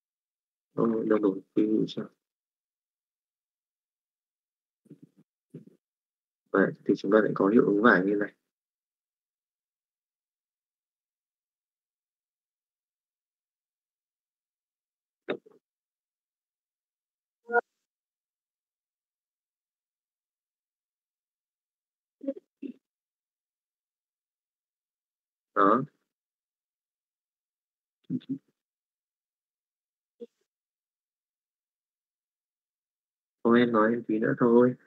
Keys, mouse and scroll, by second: 1.9 click, 3.1 middle click, 3.5 middle click, 4.3 click, 6.2 middle click, 7.3-8.6 middle drag, 9.4 click, 10.0 shift+middle click, 10.4 middle click, 11.3 click, 12.1 shift+middle click, 12.4 middle click, 13.7 middle click, 18.0 middle click, 19.5 click, 25.9 middle click, 29.2-30.2 shift+middle drag, 30.5 middle click, 31.4 click, 32.6 click.